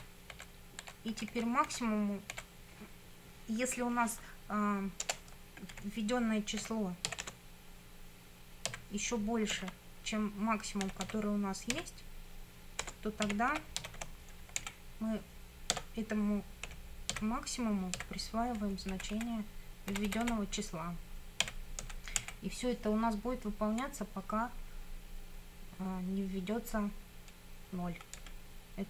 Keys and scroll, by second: 5.1 Return, 5.8 Up, 6.6 i, 7.1 f, 7.2 space, 8.7 x, 9.5 shift+., 10.6-11.7 typing, 12.8-14.5 typing, 14.6 Down, 15.8 Tab, 16.7 m, 17.1 a, 18.0 x, 18.9 Right, 19.9 Delete, 21.5 x, 21.8 Down, 22.2 Right, 28.2 Down.